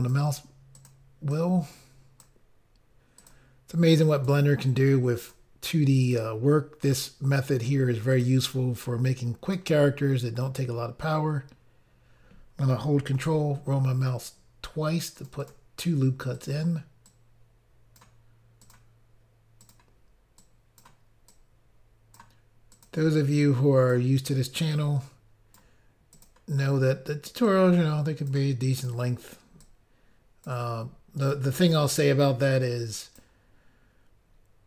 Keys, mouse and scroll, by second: 0.7 click, 0.9 click, 1.3 click, 3.2 click, 3.3 click, 3.9 click, 5.2 click, 6.0 click, 6.1 click, 6.8 click, 8.1 click, 8.2 click, 8.8 click, 13.2 ctrl+r, 14.2 scroll up 1, 15.2 click, 15.3 click, 15.4 click, 15.5 double click, 16.4 double click, 16.5 double click, 17.1 click, 18.6 click, 18.7 click, 19.6 click, 19.7 click, 20.4 click, 21.3 click, 22.7 click, 22.9 click, 23.4 click, 24.6 click, 26.1 click, 26.3 click, 27.5 click, 28.8 click, 28.9 click, 29.6 click, 31.2 click, 31.3 click, 31.9 click.